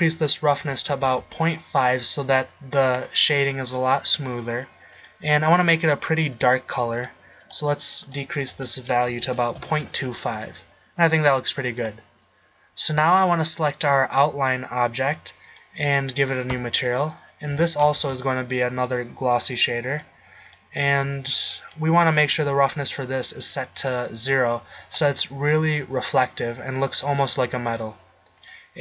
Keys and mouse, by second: 13.6-15.2 drag, 16.8-17.2 right drag, 17.7 x, 18.1 shift+a, 24.9-26.9 middle drag, 27.3-27.8 middle drag, 28.1-28.8 middle drag.